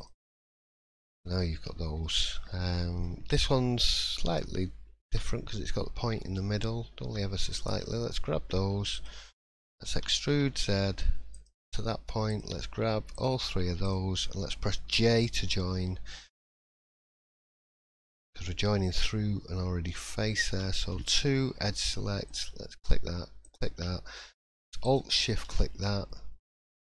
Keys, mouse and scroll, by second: 0.3-0.8 scroll down 3, 0.6 middle click, 1.2 shift+middle click, 2.8 middle click, 3.0-3.6 scroll up 2, 3.8 shift+middle click, 4.3-5.0 scroll up 1, 5.0 1, 6.1 middle click, 7.5 click, 8.9 shift+click, 9.9 e, 12.3 click, 13.1 shift+click, 14.1 shift+click, 14.9 j, 17.4 middle click, 17.8-19.9 scroll up 2, 20.4 2, 21.3 shift+middle click, 22.2 click, 23.4 shift+click, 24.8 alt+shift+click, 26.8 shift+middle click.